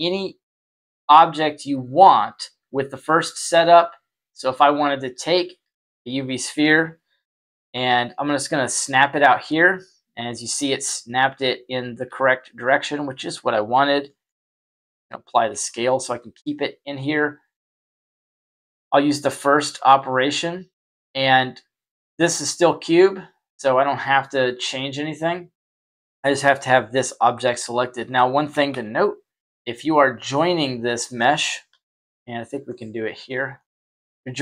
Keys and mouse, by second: 7.6 y, 9.4-10.5 middle drag, 12.0 s, 14.4 ctrl+a, 15.6-15.9 middle drag, 18.5 click, 23.2 click, 25.7 right click, 28.1-28.4 shift+middle drag, 28.6 z, 29.4-31.1 middle drag, 31.6 KP_1, 33.5-34.4 shift+middle drag.